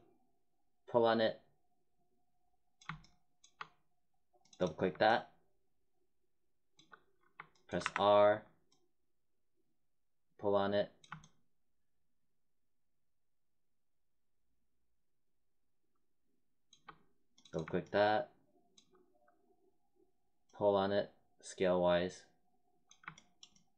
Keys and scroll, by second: 7.7 r.